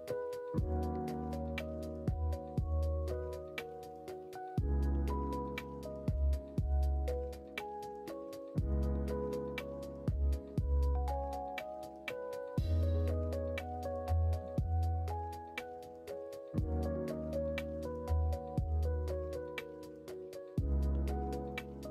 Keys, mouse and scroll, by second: 0.2 ctrl+click, 0.9 ctrl+click, 2.5 ctrl+click, 3.6 ctrl+e, 5.3 click, 6.1 ctrl+e, 7.7 middle click, 9.3 alt+click, 10.8 ctrl+click, 11.7 ctrl+click, 12.4 ctrl+click, 13.1 ctrl+e, 14.3 middle click, 14.9 middle click, 15.7 shift+middle click, 17.1 shift+middle click, 18.7 alt+click, 19.5 alt+click, 20.7 ctrl+click.